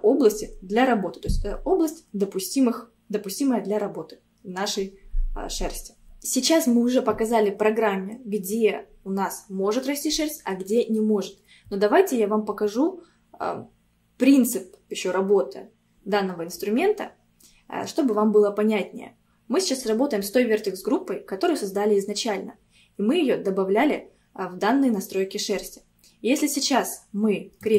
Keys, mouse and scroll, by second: 27.6 click.